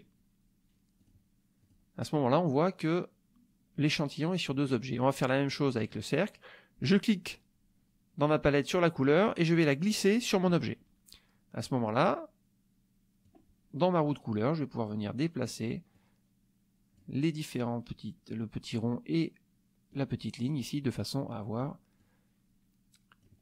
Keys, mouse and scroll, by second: 1.0 click, 1.6 click, 6.8-10.6 drag, 13.2 click, 14.7 click, 15.9-17.1 drag, 19.9 click, 21.0 click, 22.0-23.4 drag.